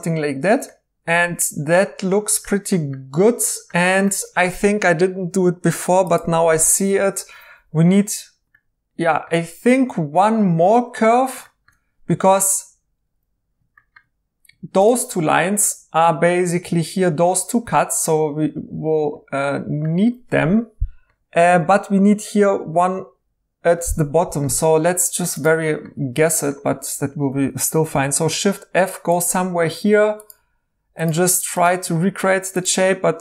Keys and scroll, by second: 27.9 f.